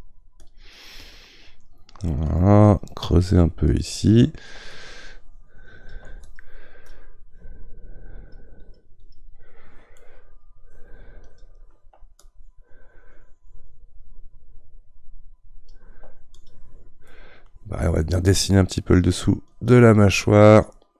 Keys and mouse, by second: 9.9-11.3 middle drag, 11.3-15.2 drag, 16.3 click, 17.1-18.9 middle drag, 18.9-20.9 drag.